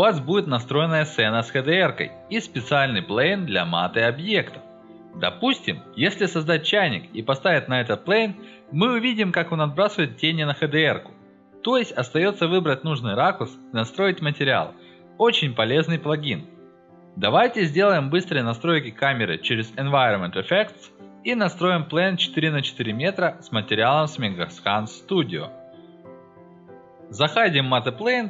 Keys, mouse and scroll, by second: 0.9 middle click, 1.3-1.6 scroll down 1, 2.0 middle click, 2.5-4.7 alt+middle drag, 14.2 click, 16.1-16.4 drag, 16.8 middle click, 20.0 click, 21.0 click, 23.2 BackSpace, 23.6 4, 24.0 m, 24.3 Return, 25.4 click, 25.9-27.1 typing, 27.5 click.